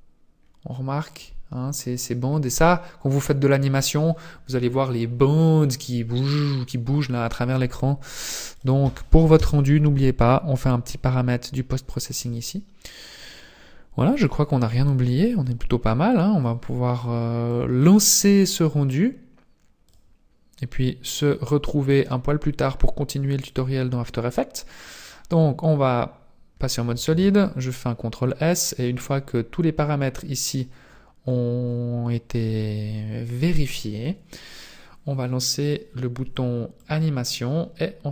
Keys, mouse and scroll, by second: 0.0-0.6 scroll up 2, 2.0-2.7 scroll down 3, 8.7 click, 12.5 click, 13.2 scroll down 1, 14.3 click, 15.3 click, 16.1 click, 17.4 click, 19.4 click, 22.1 click, 23.6 click, 27.2 ctrl+s, 28.7-30.4 scroll up 6, 30.6-31.3 scroll up 5, 31.8-35.1 scroll up 8, 36.9 click.